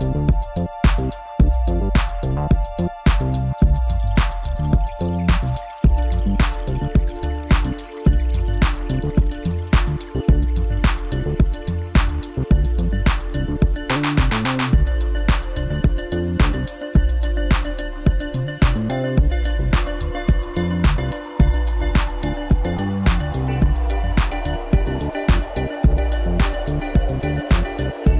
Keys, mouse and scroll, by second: 3.3-4.4 middle drag, 4.4 KP_1, 5.2-5.7 scroll up 1, 5.7-8.8 middle drag, 8.8 Tab, 9.8 ctrl+r, 12.9 s, 17.6-19.8 middle drag, 19.8 s, 22.8 click, 23.9 click, 24.6-25.9 middle drag, 25.9 shift+click, 27.1 e.